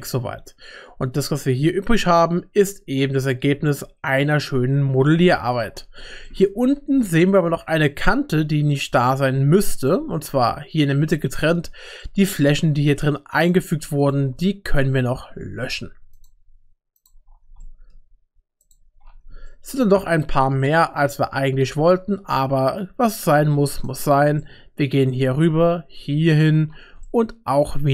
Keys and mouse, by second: 1.4 Tab, 3.7-5.0 middle drag, 5.3 shift+middle click, 5.4 shift+click, 6.2 middle click, 7.6 Tab, 8.3 2, 8.9 click, 9.8 shift+click, 10.2 middle click, 11.1 shift+middle click, 12.0 middle click, 12.6 3, 13.4 click, 14.0 shift+click, 14.5 shift+middle click, 17.0 shift+click, 17.6 shift+click, 19.5-21.2 shift+middle drag, 22.4 middle click, 24.4 middle click, 26.3 shift+click, 27.0 shift+middle click, 27.7 shift+click.